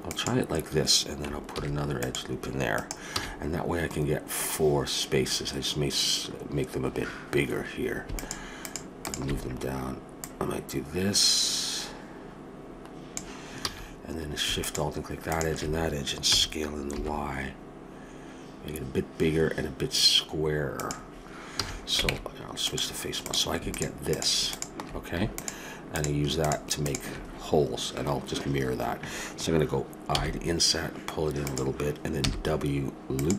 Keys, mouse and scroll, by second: 1.5 ctrl+r, 3.1 a, 5.6-8.1 middle drag, 8.1-11.9 drag, 13.6 a, 14.6-17.0 drag, 16.3 s, 21.6 a, 22.1 ctrl+Tab, 23.2-24.8 drag, 30.1 i, 32.2 w.